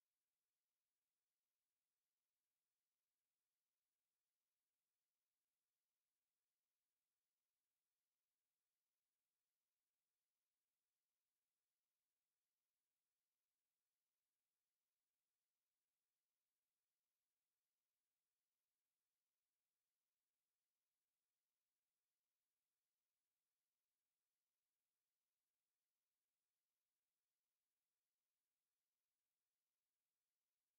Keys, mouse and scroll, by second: 0.6 click, 1.8 KP_1, 3.1 click, 4.8 click, 5.6 click, 7.1 click, 8.5 click, 10.7 click, 12.7 click, 13.8 click, 14.5 right click, 15.5 click, 16.7 click, 18.1 KP_3, 18.9 KP_Enter, 21.3 click, 24.8 click, 27.1 click, 28.7 right click.